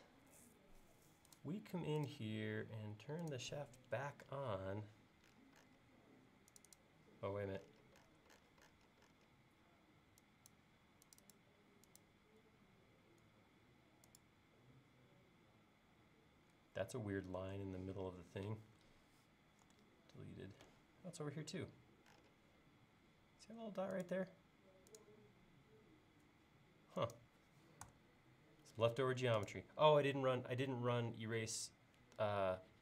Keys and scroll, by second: 19.7 BackSpace, 27.9 BackSpace.